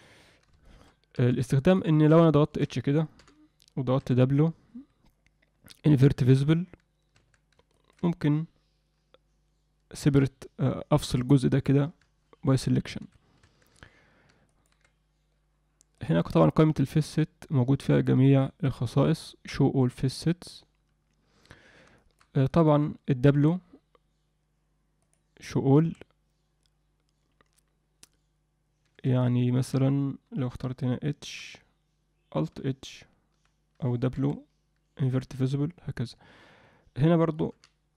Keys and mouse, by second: 0.6 alt+shift+middle click, 1.2 f, 1.9 shift+middle click, 2.4 ctrl+alt+middle click, 3.2 h, 4.0 w, 7.2 Tab, 7.7 ctrl+middle click, 11.8 p, 13.6 Tab, 14.5 ctrl+middle click, 16.0-20.2 drag, 22.0 alt+shift+middle click, 22.5 ctrl+middle click, 23.3 w, 31.2 h, 34.2 w.